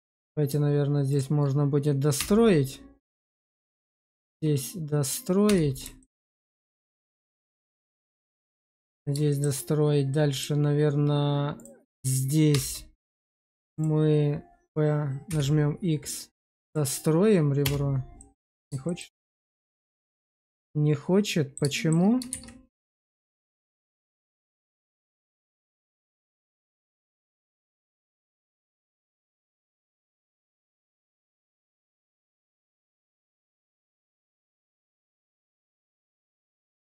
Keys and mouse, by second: 0.0 click, 1.0 shift+click, 2.1 2, 3.1 click, 4.2 shift+click, 5.4 2, 5.9 shift+click, 6.3 click, 6.4-7.9 middle drag, 8.0 shift+middle click, 8.6 middle click, 9.2 shift+middle click, 10.0 middle click, 12.4 2, 18.1 middle click, 18.8 shift+middle click, 19.5-21.5 middle drag, 21.7 shift+middle click, 22.3 shift+z, 22.6 middle click, 23.3 Tab, 23.8 middle click, 25.0 click, 25.6 shift+middle click, 26.0-30.0 middle drag, 30.4 x, 31.9 shift+middle click, 32.4 middle click, 33.1 click, 33.4 x, 34.7 shift+z, 35.1 shift+middle click, 35.4 middle click, 35.9 Tab, 36.5 middle click.